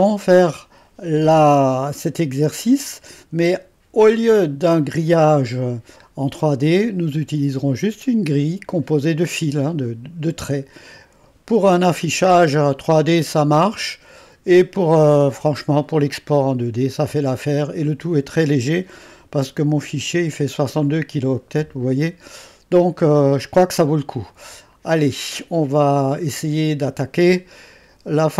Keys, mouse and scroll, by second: 1.9-4.0 scroll up 2, 4.0-5.5 drag, 5.5-8.1 scroll up 2, 8.1-8.6 scroll up 1, 8.6 scroll up 1, 8.8-10.7 scroll down 2, 10.7-11.6 scroll down 1, 11.6-22.3 drag, 23.2-27.2 drag.